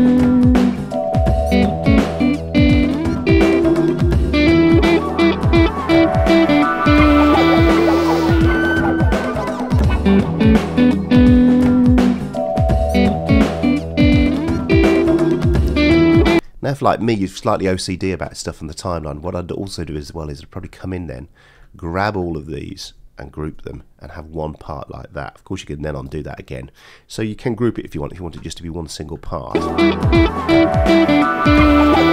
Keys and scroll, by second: 16.4 space, 23.5 shift+g, 24.1 g, 25.8 super+z, 27.9 g, 29.5 space.